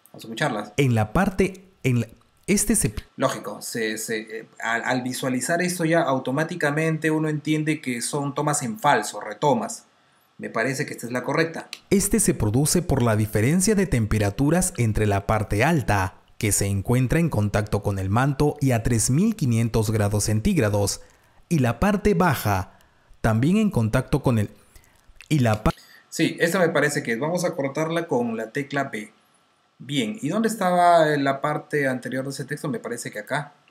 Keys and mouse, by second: 2.5 space, 10.9 click, 14.6 r, 25.4 space, 28.5 b, 33.0 click.